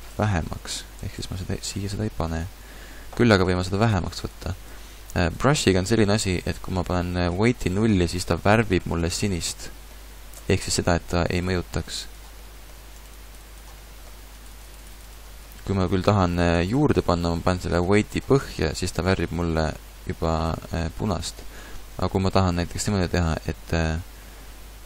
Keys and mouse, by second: 0.8-2.5 ctrl+z, 10.2 middle click, 20.8 ctrl+z.